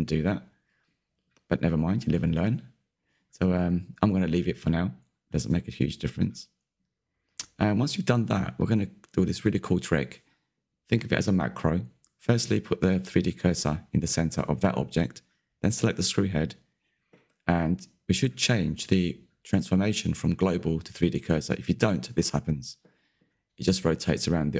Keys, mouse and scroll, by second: 0.1 Tab, 1.1 /, 2.3-4.1 middle drag, 4.1 click, 4.6-5.1 scroll down 1, 5.1-5.8 scroll down 1, 5.8-7.2 middle drag, 7.2 click, 7.7-10.5 middle drag, 10.5 click, 12.8 shift+s, 13.5-16.3 middle drag, 16.3 click, 17.3-20.5 middle drag, 20.5 alt+d.